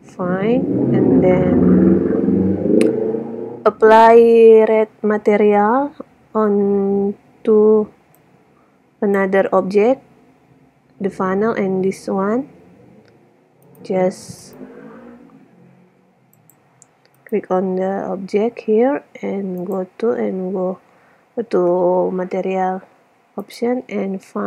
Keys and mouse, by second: 1.4 a, 13.7-16.8 drag, 17.2-18.9 drag, 19.5 middle click, 21.4-22.6 middle drag.